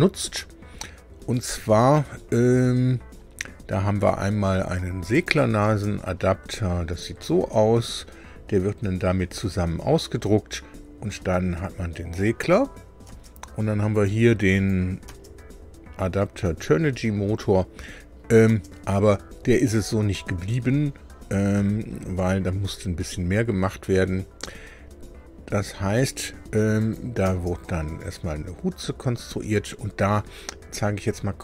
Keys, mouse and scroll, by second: 5.1 click, 5.6 space, 6.7 scroll down 2, 7.2-12.3 middle drag, 13.0 space, 13.9 click, 14.5 click, 15.0 space, 18.4 space, 25.3 scroll down 2, 26.7 click, 27.2 space.